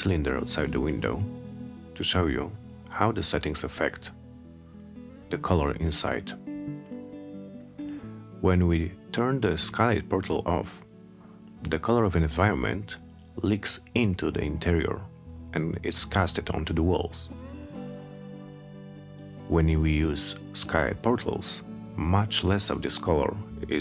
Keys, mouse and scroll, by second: 3.6 click, 16.8 click.